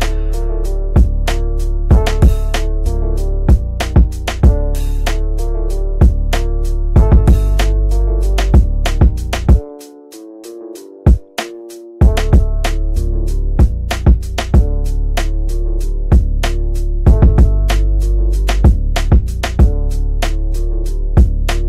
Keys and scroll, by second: 16.0 g.